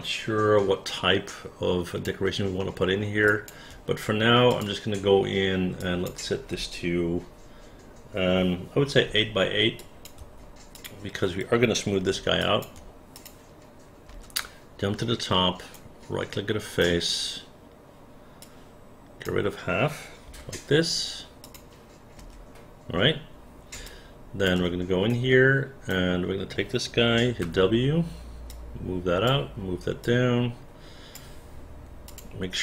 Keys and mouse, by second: 2.6 alt+middle click, 3.3 alt+click, 5.9 click, 9.1 KP_8, 9.8 click, 10.2 KP_8, 10.8 click, 12.5 alt+click, 13.2 click, 14.1 space, 14.4 space, 15.8-16.8 right drag, 18.4 click, 20.3 Delete, 21.5 click, 22.2 space, 23.9 alt+click, 25.1 right click, 27.5 w, 28.5 click, 30.0-31.2 drag, 32.1 click.